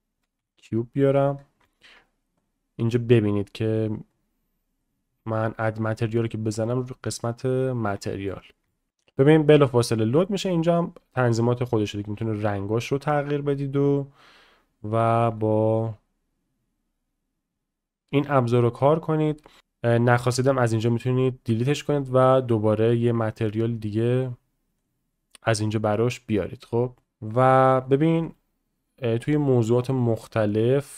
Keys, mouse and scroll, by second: 1.6 shift+middle click, 2.5-4.2 drag, 7.9-8.6 shift+middle drag, 8.7 shift+middle click, 9.0 shift+middle click, 9.3-9.6 shift+middle drag, 9.7-10.0 middle drag, 13.8 click, 15.8-18.4 drag, 20.5 click, 21.7-24.1 drag, 25.5-27.0 middle drag, 27.0-27.9 drag, 28.2-29.8 drag, 30.5 drag.